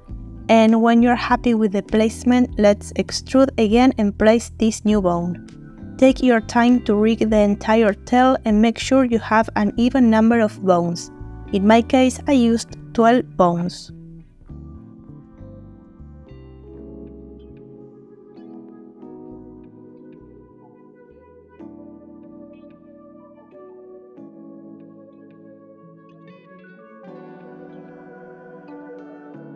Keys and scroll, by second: 0.0 r, 3.2 r, 4.2 e, 6.1 r, 8.0 r, 10.4 e, 12.8 Escape, 14.4 g, 16.4 g, 17.2 r, 19.3 e, 22.9 e, 28.9 g.